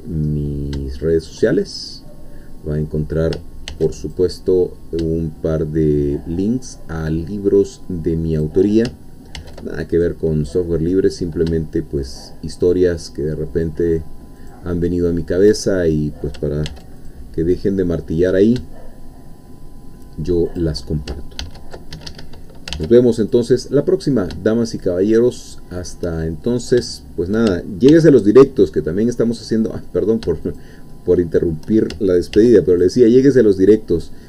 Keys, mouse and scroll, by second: 0.3-1.5 middle drag, 1.6 shift+middle click, 3.7 ctrl+r, 4.0 ctrl+click, 8.3 shift+click, 9.4 ctrl+r, 9.9 ctrl+click, 14.4 shift+click, 14.7 shift+middle click, 15.9-16.3 shift+scroll up 3, 16.7 ctrl+r, 17.1 ctrl+click, 20.5 shift+click, 21.4 ctrl+e, 21.9 Escape, 22.7 ctrl+r, 23.3 ctrl+click, 25.8 shift+click, 26.9 shift+middle click, 27.9 ctrl+r, 28.1 ctrl+click, 30.5 shift+click, 30.9 shift+middle click, 32.3 ctrl+r, 32.8 ctrl+click.